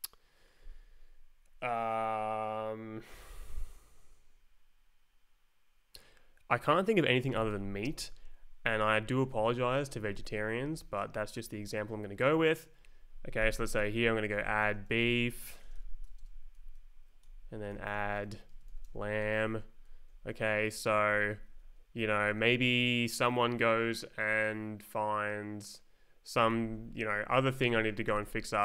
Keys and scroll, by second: 7.0-8.0 typing, 8.7 Right, 9.5 Left, 10.1 Right, 10.6 Left, 12.8 Right, 13.7-19.4 typing, 20.1 Down, 21.1 Up, 22.1 Down, 26.5 ctrl+s, 26.9 Down, 27.8 Up, 28.0-28.6 typing.